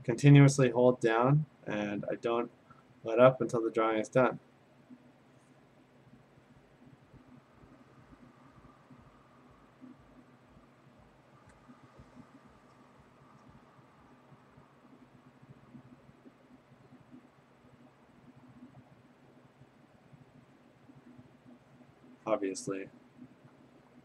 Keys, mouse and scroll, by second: 15.9-19.0 drag.